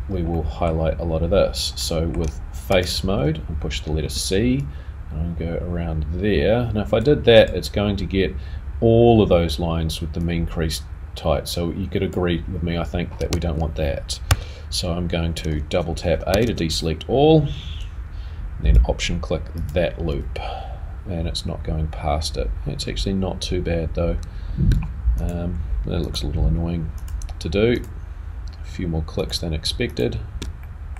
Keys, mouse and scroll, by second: 0.3 middle click, 0.3 click, 1.8 middle click, 12.7-13.0 scroll up 3, 13.3 a, 16.5 2, 16.5 a, 20.1 alt+click, 30.4 alt+shift+click, 30.6 middle click.